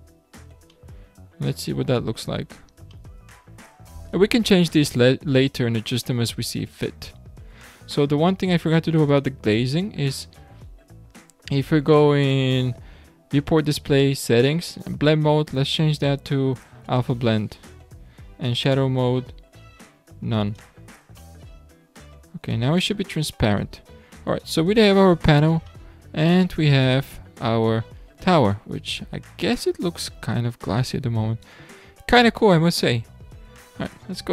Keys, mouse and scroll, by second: 0.0-0.8 scroll down 5, 0.8-2.4 middle drag, 2.4-3.0 scroll up 5, 3.0-4.5 shift+middle drag, 4.5-5.9 scroll down 6, 5.9-7.4 middle drag, 7.4-8.0 scroll down 1, 8.0-9.1 scroll up 9, 9.1 click, 10.2-14.0 scroll down 12, 14.1-15.1 scroll down 4, 15.1-18.1 drag, 18.4-21.3 drag, 21.3-23.5 middle drag, 23.5-24.4 scroll down 8, 24.4 scroll up 1, 24.6-25.7 scroll down 9, 25.7-26.1 shift+middle drag, 26.1 shift+scroll up 1, 26.4-27.0 scroll down 8, 27.0-28.0 middle drag, 28.0 scroll up 5, 28.5-31.5 middle drag, 33.6-34.3 scroll down 1.